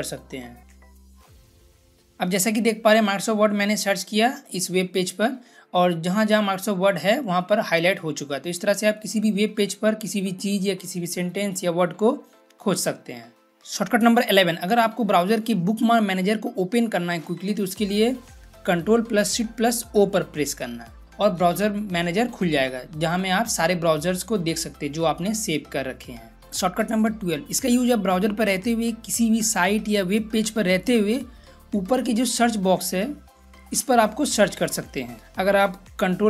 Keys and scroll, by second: 0.0-2.1 typing, 19.8 ctrl+shift+o.